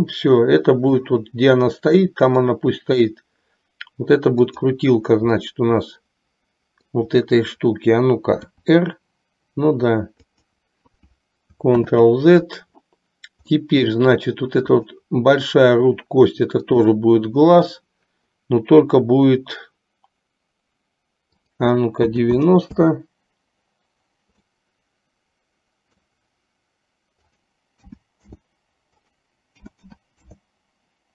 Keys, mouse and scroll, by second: 1.1 scroll up 1, 1.3-2.6 middle drag, 5.6-7.2 middle drag, 8.7 r, 11.9 ctrl+z, 13.6-14.2 middle drag, 14.8 click, 16.7-17.3 drag, 21.3-23.2 drag, 24.6-26.3 middle drag, 27.3-28.7 drag, 29.1-30.7 drag.